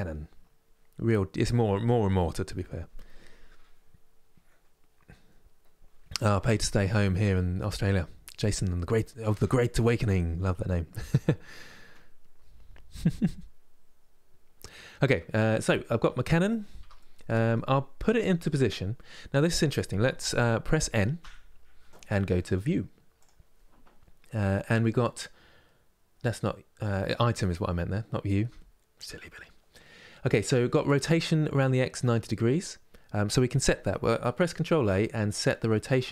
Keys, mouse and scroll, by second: 15.2-16.5 middle drag, 16.5 Tab, 16.6-22.9 middle drag, 22.9-25.9 drag, 26.5-29.5 drag, 34.3 ctrl+a.